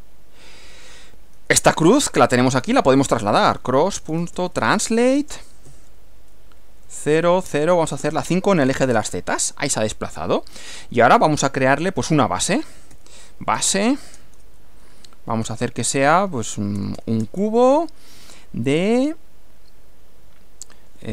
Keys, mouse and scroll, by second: 2.2-8.6 typing, 5.7 shift+Left, 8.9 Return, 11.7 click, 12.4-14.3 typing, 16.2-18.0 typing, 21.0-21.1 typing.